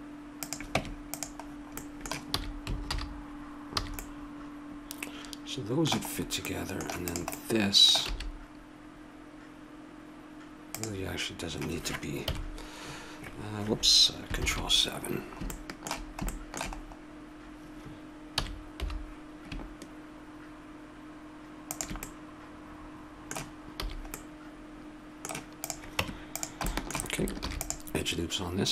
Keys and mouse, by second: 0.8 Tab, 2.3 a, 2.9 alt+h, 3.8 a, 7.1-8.8 right drag, 8.0 s, 12.2 KP_7, 14.4 ctrl+KP_7, 15.2 middle click, 16.7 middle click, 18.3 s, 22.0 middle click, 23.0 middle click, 23.8 a, 24.2 middle click, 25.6-26.8 right drag, 26.0 Tab, 27.4 ctrl+r, 27.7 click.